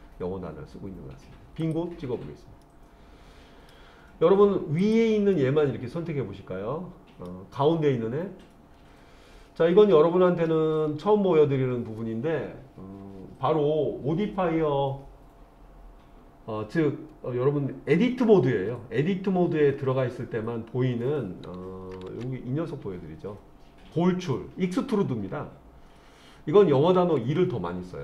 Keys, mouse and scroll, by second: 1.6 click, 2.6-3.7 middle drag, 4.8 click, 5.4-7.3 middle drag.